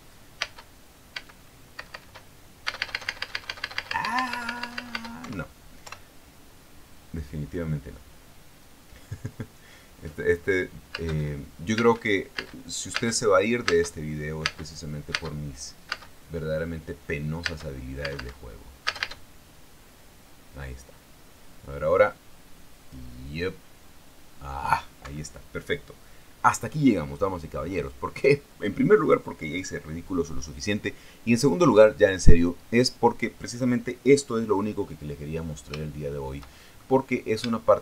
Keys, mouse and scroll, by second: 1.7 space, 2.4 space, 5.9 Escape, 11.6 space, 12.8 space, 15.0 space, 15.7 space, 16.4 space, 17.1 space, 18.1 space, 20.0 space, 25.7 Escape, 36.1-36.5 scroll down 2, 36.5-37.7 shift+middle drag.